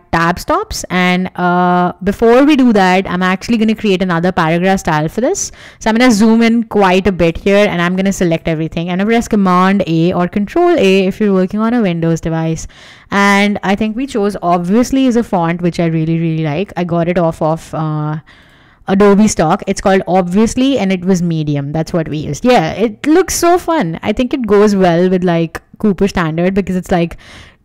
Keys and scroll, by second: 8.4 super+a, 14.0-15.7 typing, 21.6 Escape.